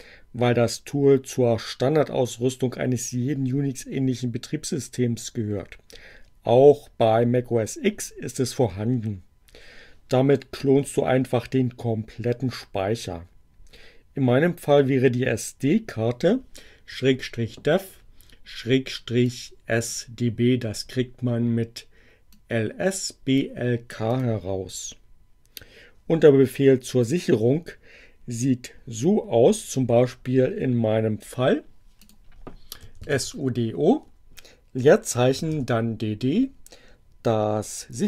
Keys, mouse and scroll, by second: 19.1 click, 22.2-23.4 drag, 23.9 click, 31.8 click, 32.5-35.1 typing.